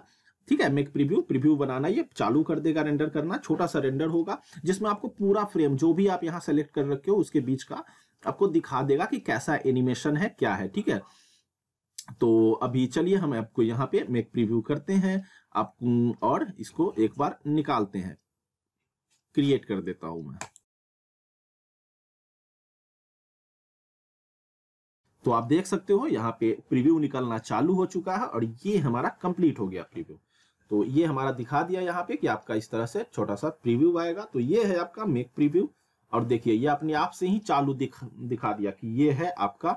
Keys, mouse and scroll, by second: 20.4 click.